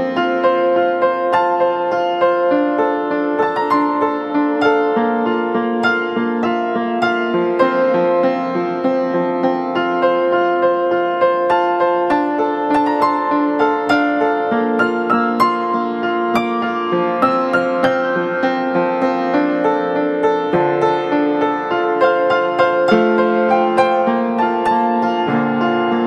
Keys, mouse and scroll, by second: 7.6 double click.